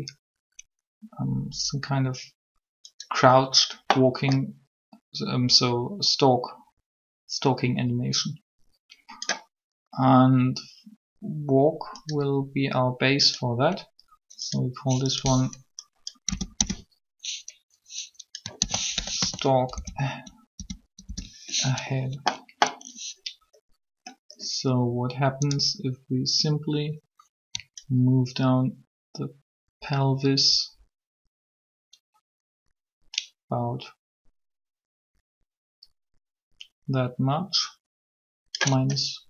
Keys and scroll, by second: 16.3 BackSpace, 16.5 BackSpace, 18.6 shift+s, 19.5 1, 20.5 BackSpace, 21.0 Return.